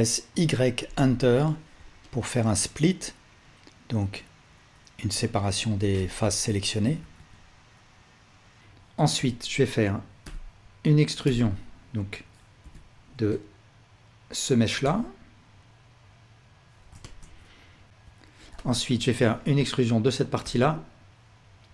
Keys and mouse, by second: 0.9 Return, 2.1-7.1 alt+drag, 7.1 alt+a, 7.3-11.6 drag, 8.6 x, 9.2 l, 10.2 l, 12.6 click, 14.8 e, 17.0-18.5 alt+shift+drag, 17.9 ctrl+z, 19.2-21.7 ctrl+alt+drag.